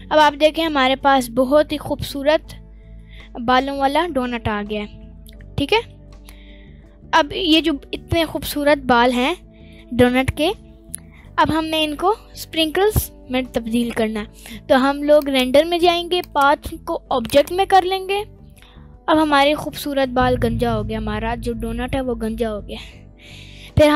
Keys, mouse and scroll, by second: 2.2 scroll down 1, 2.9-5.9 middle drag, 2.9 scroll down 2, 6.5 scroll down 1, 7.4 scroll down 3, 7.4-8.3 scroll up 4, 8.3-9.7 middle drag, 10.5-11.2 middle drag, 18.7 click, 19.6-20.1 middle drag, 19.6 scroll up 2, 20.4-20.9 scroll down 2, 20.8-21.3 middle drag.